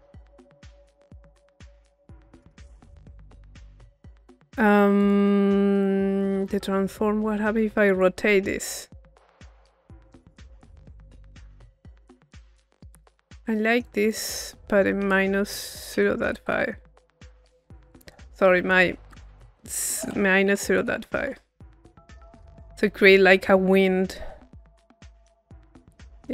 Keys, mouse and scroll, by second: 5.0-7.0 drag, 7.6-12.6 middle drag, 12.6-13.6 drag, 13.6 middle click, 13.9-16.5 drag, 17.9 click, 22.2-24.1 drag, 25.2 click, 26.2-26.3 drag.